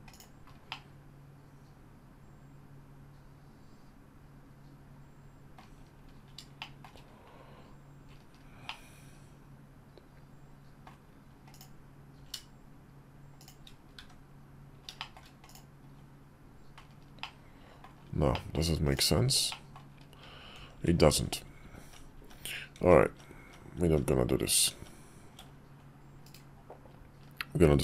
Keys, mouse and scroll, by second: 0.4-5.3 middle drag, 6.3 shift+middle drag, 8.4-10.6 middle drag, 11.9 s, 13.7 `, 14.8 shift+middle click, 15.2 click, 16.9-17.5 middle drag, 18.0 middle drag, 19.2 middle drag, 20.3 ctrl+z, 20.8-26.3 ctrl+z.